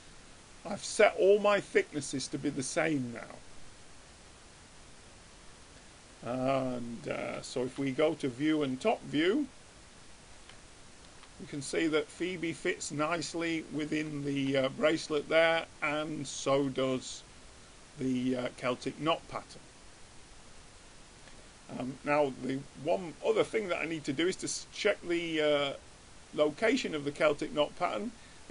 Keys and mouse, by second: 0.6 middle click, 1.1-2.2 drag, 2.2-3.8 middle drag, 7.6-9.3 middle drag, 8.8-10.9 drag, 8.8 right click, 10.4 right click, 10.9 middle click, 11.8 middle click, 15.2-18.7 middle drag, 19.3-21.9 middle drag, 22.9-24.5 drag, 24.0-25.9 middle drag.